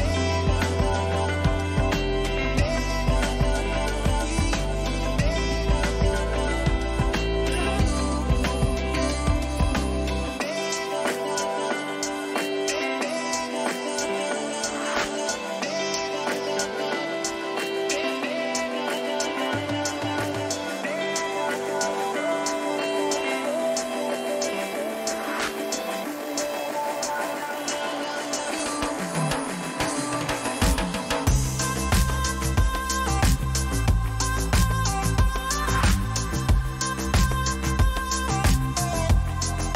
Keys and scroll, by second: 9.0 ctrl+alt+z, 10.4 ctrl+alt+z, 16.8 ctrl+alt+z, 18.5 ctrl+alt+z, 20.2 ctrl+alt+z, 23.7 ctrl+shift+z, 25.8 ctrl+t, 33.3 Return, 35.5 ctrl+t, 36.1 ctrl+-, 39.5 Return.